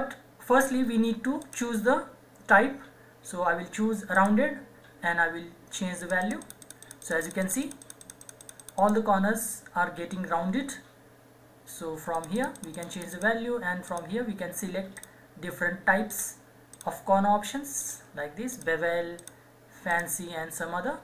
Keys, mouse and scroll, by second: 1.5 click, 4.1 click, 12.1 click.